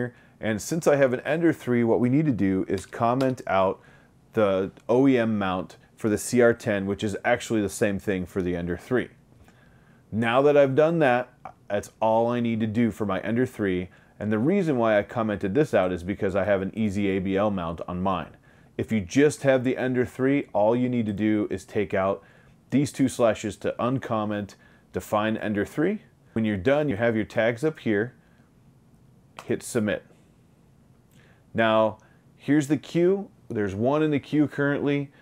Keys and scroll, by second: 2.9 BackSpace, 3.3 BackSpace, 26.1-26.9 typing, 28.0 BackSpace, 28.8 BackSpace, 30.5 l.